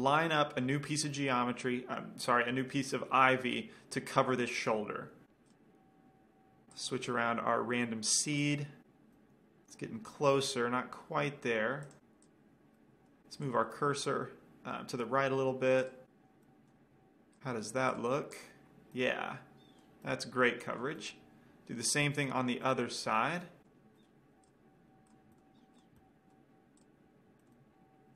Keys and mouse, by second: 0.1-0.9 drag, 5.6-6.4 drag, 7.3-9.6 drag, 9.4 right drag, 9.6 middle click, 12.1-13.1 drag, 13.7-14.9 drag, 13.7-15.6 middle drag, 13.7-15.6 right drag, 16.3 click, 17.6-20.5 drag, 19.4-19.8 right drag, 20.5-24.2 middle drag, 24.4 middle click, 24.6-25.4 drag, 25.4 right drag, 25.6-26.6 middle drag, 27.0 click, 27.6-28.1 middle drag.